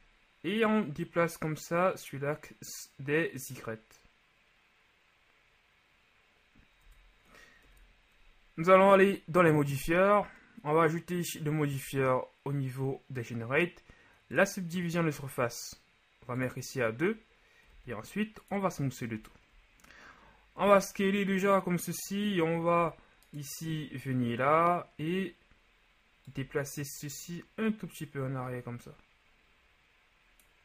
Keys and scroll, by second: 6.9 Tab, 7.6 KP_1, 17.8 w, 20.6 Tab.